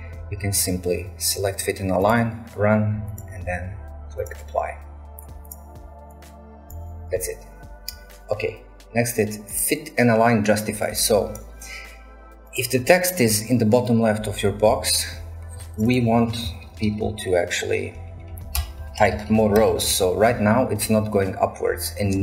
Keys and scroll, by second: 16.6-19.9 typing, 18.6 shift+Return, 19.6 shift+Return.